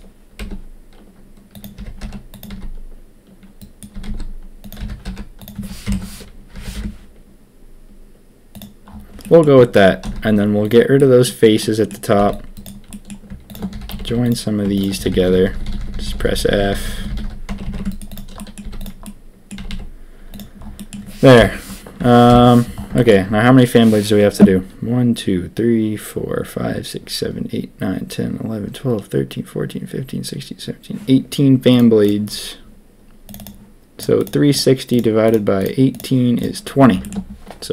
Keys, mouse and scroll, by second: 0.3 s, 1.7 g, 2.4 s, 3.9 s, 4.7 g, 5.8 ctrl+KP_3, 6.5 g, 9.2 click, 10.0 x, 10.9 click, 11.6 click, 12.1 c, 12.8 click, 13.4 shift+click, 13.7-19.6 typing, 14.2 click, 14.7 shift+click, 17.7 Tab, 17.9 click, 18.3 middle drag, 19.0-19.4 drag, 20.3 click, 20.7 click, 21.3 KP_1, 22.2 ctrl+KP_1, 22.9 shift+drag, 37.0 shift+click.